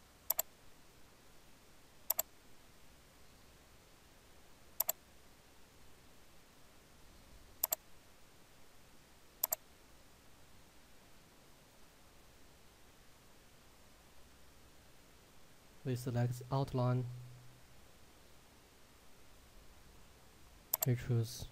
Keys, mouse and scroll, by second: 4.9 click, 7.6 click, 13.3-14.2 scroll up 1, 16.2-18.4 scroll down 1, 20.8 click.